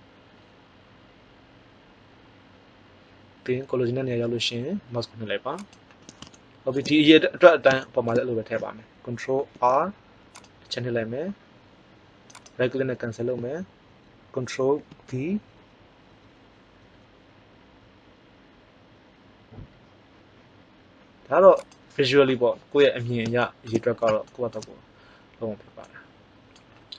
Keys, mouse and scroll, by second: 5.6-7.0 drag, 9.3 ctrl+r, 14.7 ctrl+b, 21.6-23.2 drag.